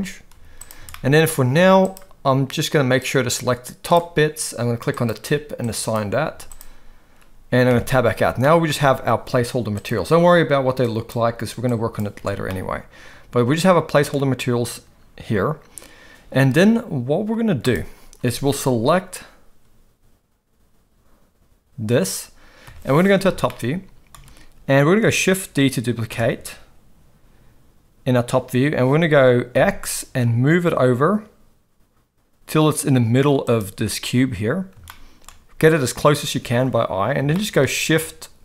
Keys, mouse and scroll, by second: 0.3 z, 0.9 shift+middle click, 1.6 z, 3.0 click, 4.9 click, 5.7 click, 6.2 z, 7.7 Tab, 8.4 middle drag, 8.7 alt+a, 9.8 click, 12.2 alt+a, 12.5-14.1 middle drag, 22.7 KP_7, 23.5-24.1 shift+middle drag, 26.1 shift+d, 35.0-35.3 shift+middle drag, 37.5 middle click.